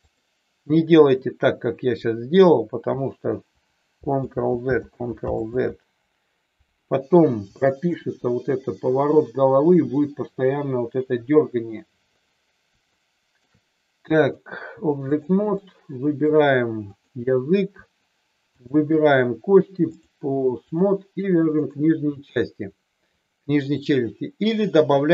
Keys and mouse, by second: 4.1 ctrl+z, 4.8 ctrl+z, 5.3 ctrl+z, 7.5 shift+middle click, 12.9-13.4 shift+middle drag, 14.1-15.3 drag, 15.5-16.3 middle drag, 16.8 click, 18.5 shift+click, 19.9 click.